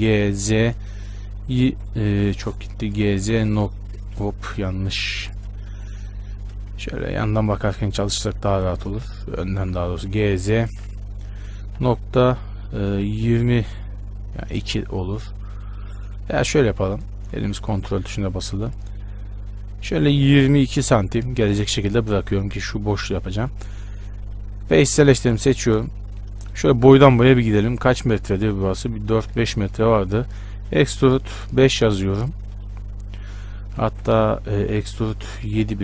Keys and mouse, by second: 0.1 g, 3.1 h, 3.4 z, 4.3 Escape, 4.9 ctrl+z, 5.4 z, 6.9 KP_1, 7.5 z, 9.8 g, 17.3-26.7 drag, 26.7-30.8 right drag, 30.8 e, 33.9 click, 34.1 ctrl+z, 34.8 e.